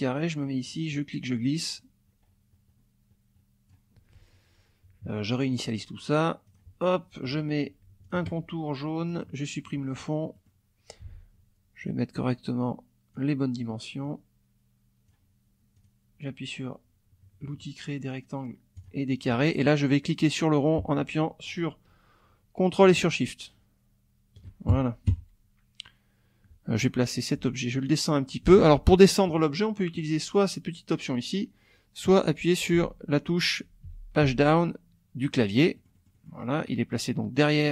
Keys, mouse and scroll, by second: 0.9-3.9 drag, 5.7 click, 6.5 click, 8.0 shift+click, 9.1 click, 9.5 click, 10.3 middle click, 11.0 F1, 11.8-13.3 drag, 14.0-15.3 drag, 15.8 click, 18.8 click, 20.7-24.5 ctrl+drag, 25.1 F1, 27.4 Page_Down, 28.5 ctrl+z, 32.7 Page_Down, 33.9 Page_Up, 34.2 Page_Down, 35.7 click, 37.3 click.